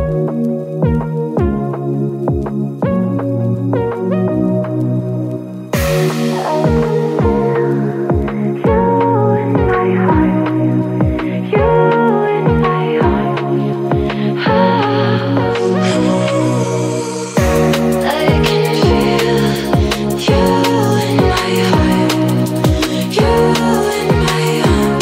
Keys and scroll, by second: 22.0 Up.